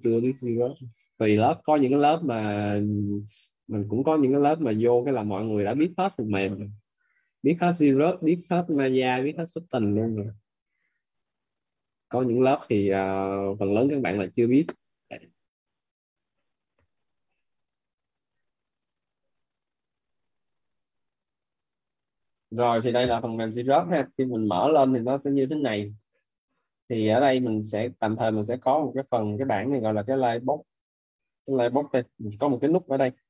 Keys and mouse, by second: 1.9 click, 11.0 click, 13.6 click, 18.8 click, 19.5-22.1 typing, 22.1 Return.